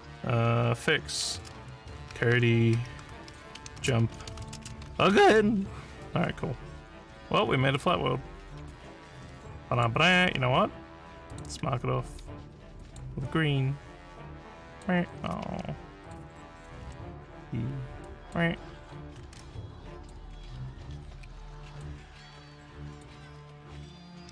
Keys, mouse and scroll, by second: 0.6-5.6 typing, 7.7 click, 8.7-9.8 drag, 10.1 click, 11.3 click, 12.8 click, 14.6 click, 15.5 s, 16.0 click, 18.0 click, 19.3 ctrl+z, 19.9 click, 21.7 click, 22.9 click.